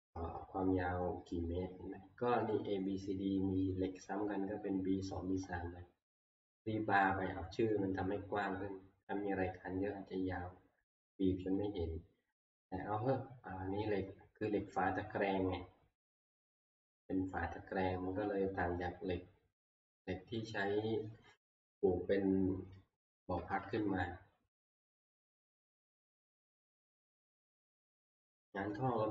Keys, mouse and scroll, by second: 15.6 scroll, 16.0-17.2 scroll down 18, 17.2-20.1 scroll up 8, 20.1-20.6 scroll down 3, 20.6 scroll, 21.3 scroll, 24.0 scroll up 10, 24.5 middle click, 26.6 click, 27.0 scroll down 4, 27.4 scroll, 28.7 shift+middle click.